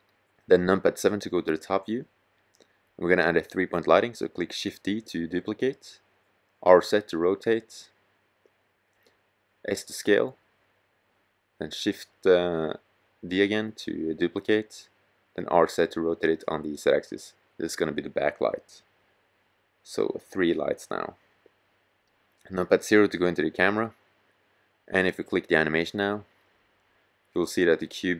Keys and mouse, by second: 0.5 KP_7, 3.9 shift+d, 5.4 drag, 5.7 r, 8.3-8.7 drag, 8.7 s, 9.2 click, 10.5 shift+d, 12.9 r, 16.3-19.4 drag, 16.9 s, 18.1 g, 19.6 click, 20.8 KP_0, 24.5-26.2 drag.